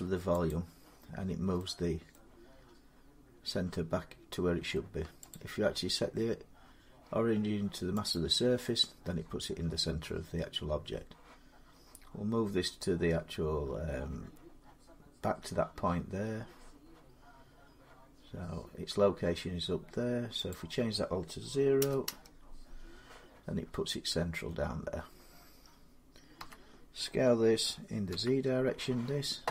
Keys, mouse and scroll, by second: 0.3 click, 1.9 middle click, 2.4 scroll up 2, 5.1 click, 6.9 scroll, 7.9 click, 9.5-10.1 scroll down 1, 13.0-13.7 scroll up 1, 13.8-14.5 scroll down 1, 20.3 click, 21.6 0, 21.9 Return, 23.4-24.3 scroll up 6, 24.3 scroll down 4, 26.2 s, 27.9 z.